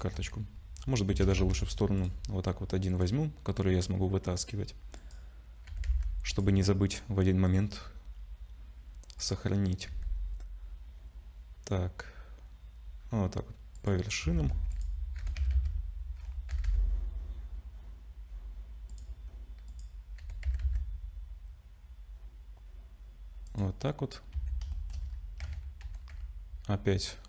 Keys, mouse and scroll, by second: 0.8-1.1 scroll down 3, 1.1 shift+d, 2.9 click, 5.0 click, 5.7 g, 7.5 click, 7.9-8.7 scroll up 2, 9.2 click, 9.9 g, 14.2 Tab, 14.5 2, 14.7 click, 15.2 g, 19.7 click, 20.2 g, 24.3 a, 24.7 shift+middle click, 25.1-25.4 scroll up 3, 25.8 ctrl+shift+v.